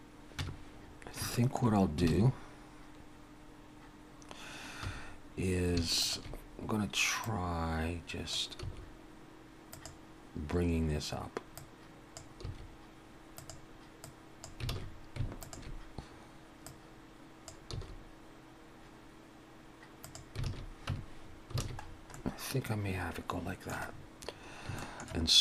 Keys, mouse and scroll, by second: 0.4 Tab, 0.8-1.2 scroll up 2, 1.3 shift+middle click, 2.1 alt+a, 4.8 2, 6.0 alt+shift+click, 7.2 click, 8.7 s, 11.6 click, 12.5 s, 14.1 click, 14.7 alt+a, 15.4 alt+shift+click, 16.7 click, 18.4 s, 20.4 alt+a, 20.9 Tab, 21.2-22.0 scroll down 4, 21.6 alt+a, 22.1 middle click, 23.9-24.6 scroll up 4, 24.8 shift+middle click.